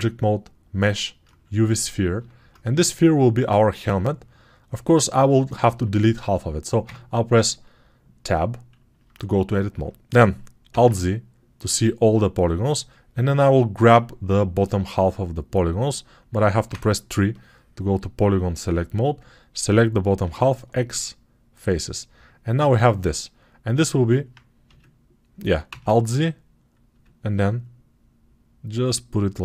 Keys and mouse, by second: 6.7 Tab, 10.6 alt+z, 20.1 x, 24.5 a, 25.5 alt+z, 26.9 s, 29.3-29.4 alt+middle drag.